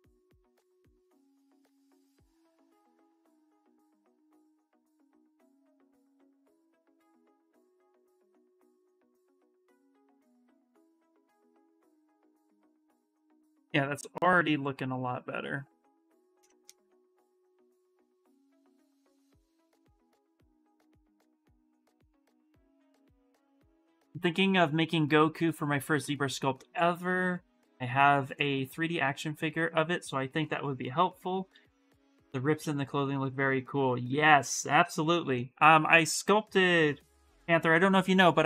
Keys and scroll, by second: 1.8 d, 3.4 d.